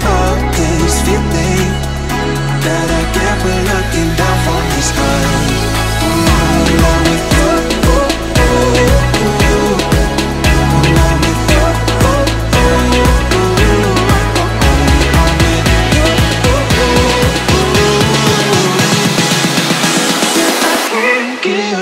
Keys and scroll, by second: 8.7 r, 14.9 ctrl+z.